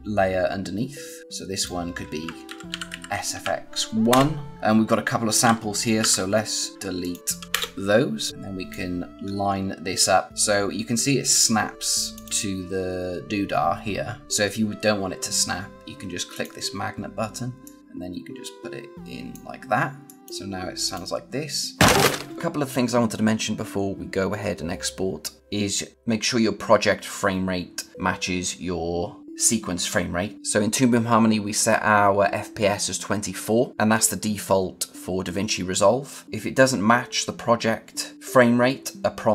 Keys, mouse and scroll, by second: 1.4 click, 2.1-3.7 typing, 4.0 Return, 4.6 click, 5.9 b, 6.6 click, 6.7 a, 6.9 click, 8.3 click, 9.8-10.3 scroll up 1, 10.3 click, 16.2 click.